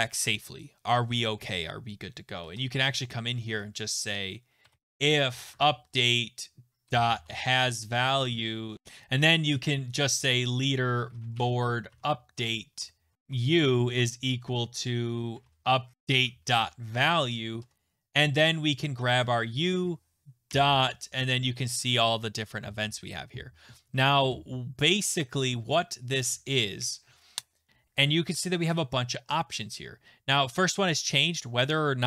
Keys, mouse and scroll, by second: 2.4 Return, 4.4-13.9 typing, 8.1 Right, 9.2 click, 15.3-18.9 typing, 20.2-21.0 typing, 22.0-23.4 scroll, 27.7 Return, 27.7 click, 27.7 BackSpace.